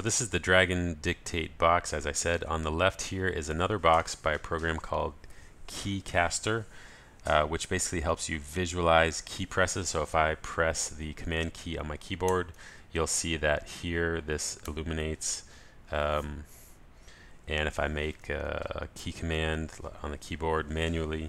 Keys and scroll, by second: 19.0 super+t.